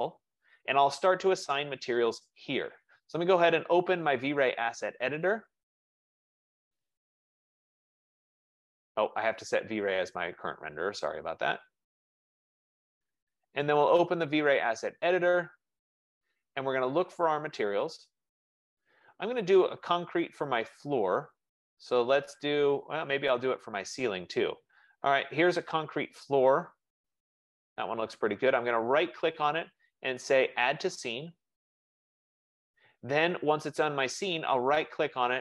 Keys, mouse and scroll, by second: 4.8 click, 10.0 click, 12.3 click, 14.5 click, 17.7 click, 20.0 click, 27.0 click, 28.9 right click, 31.0 click, 35.0 right click.